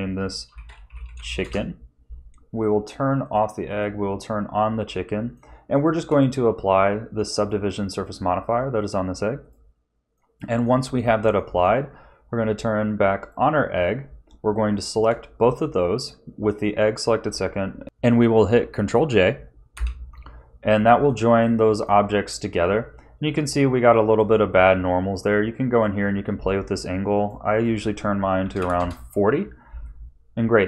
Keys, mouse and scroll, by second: 3.2 click, 3.6 click, 4.4-4.9 scroll up 3, 4.9 middle click, 5.7 shift+middle click, 7.3 click, 9.4 click, 10.1 middle click, 11.0 ctrl+s, 11.3 middle click, 13.2 click, 14.7 shift+click, 19.7 ctrl+j, 21.0 middle click, 22.6-24.0 scroll up 5, 25.1 click, 26.0 click, 27.1 click, 27.5 click, 29.8-30.6 scroll down 10.